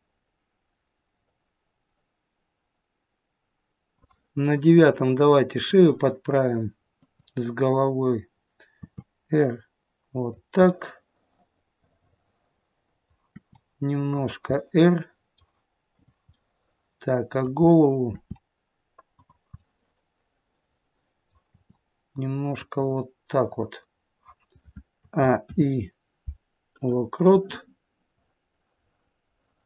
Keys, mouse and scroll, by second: 5.5 click, 6.9 click, 8.7 r, 10.5-13.3 scroll up 1, 13.3 middle click, 13.3 r, 14.5 middle click, 15.8 click, 16.5 middle click, 16.5-17.6 scroll up 1, 17.6-18.1 scroll down 1, 18.1 r, 19.6 middle click, 21.5 r, 24.9 a, 25.4 i, 28.2 click.